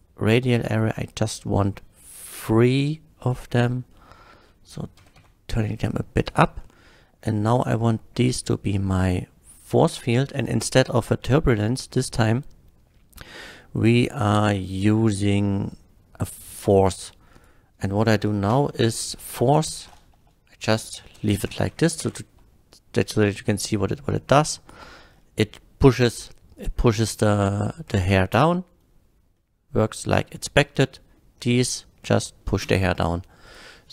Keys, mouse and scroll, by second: 0.6 middle click, 3.3 drag, 3.9-4.4 middle drag, 5.0 g, 5.2 z, 6.2 drag, 6.2 g, 6.6 middle click, 8.3 click, 9.6 click, 10.8 click, 16.3 click, 17.4 click, 18.5 KP_Subtract, 20.1-21.5 typing, 21.5 Return, 22.0 shift+Left, 24.5 click, 25.1 middle click, 26.9-27.4 middle drag, 28.4 space, 29.4-31.2 middle drag, 29.4 space, 32.0-32.4 middle drag, 32.7 space, 33.5 space, 33.5 click.